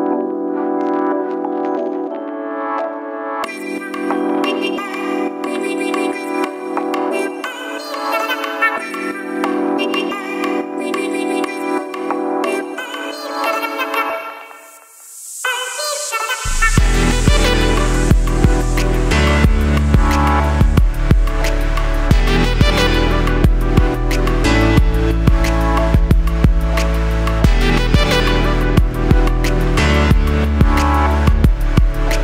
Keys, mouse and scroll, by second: 1.4-2.4 scroll down 1, 15.1 scroll.